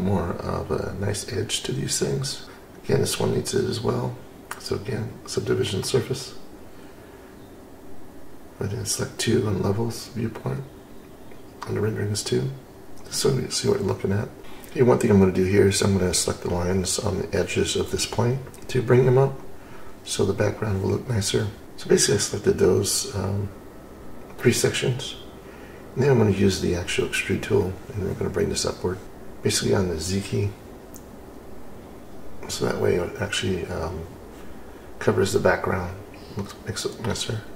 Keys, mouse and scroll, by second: 2.4-7.8 drag, 11.9-13.0 drag, 14.4 click, 14.4 scroll down 5, 19.4 click, 20.6 scroll down 2, 20.9 scroll up 1, 21.4 scroll down 2, 23.8-26.0 middle drag, 26.0-26.7 scroll up 2, 27.9 click, 29.9 click, 30.1 click, 33.6 scroll down 2.